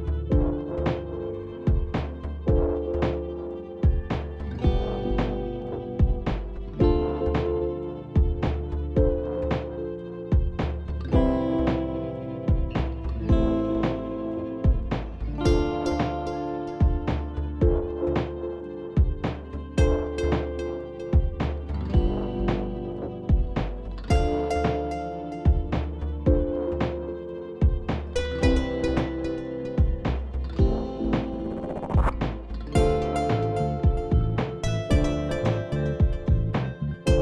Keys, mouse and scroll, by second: 2.3 click, 2.7 click, 3.0 click, 3.4 click, 3.7 click, 3.9 click, 4.2 click, 4.3-6.2 typing, 4.9 click, 6.2 click, 6.7 click, 7.5-7.9 ], 7.9 click, 8.9 right click, 10.2 click, 12.1 click, 13.3 click, 15.3 click, 15.6 click, 15.8 click, 15.8 click, 16.0 click, 16.1 click, 16.2 click, 16.3 click, 16.8 click, 18.7 click, 21.2 click, 23.6 click, 25.1 click, 27.3 click, 29.0 click, 29.2-30.4 scroll down 6, 30.4-30.8 scroll down 2, 31.9 click, 32.3 click, 35.1 click, 35.4 click, 35.4 click, 35.6-36.8 click, 35.7 click, 35.8 click.